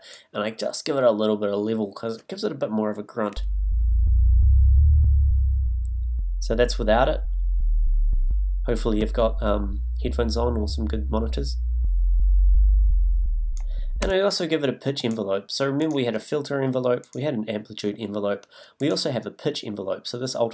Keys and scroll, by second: 3.3 space, 14.0 space.